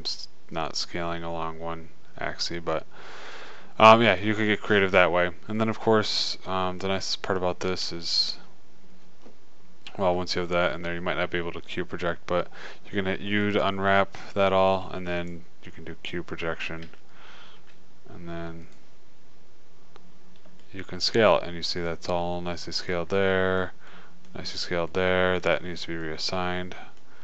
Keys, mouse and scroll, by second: 4.9 middle click, 6.0 middle click, 8.2 a, 8.3 a, 12.3-14.6 middle drag, 14.3 u, 16.5-18.5 middle drag, 17.1 a, 17.3 a, 18.2 s, 19.5 middle click.